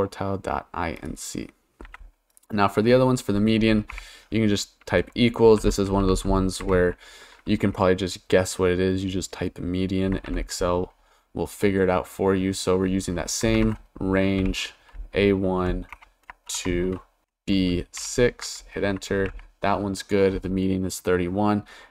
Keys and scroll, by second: 3.9 =, 5.3-7.3 typing, 10.3 shift+9, 13.5 shift+a, 14.4 1, 15.6 ,, 15.9 BackSpace, 17.2 shift+b, 18.0 6, 18.4 Return.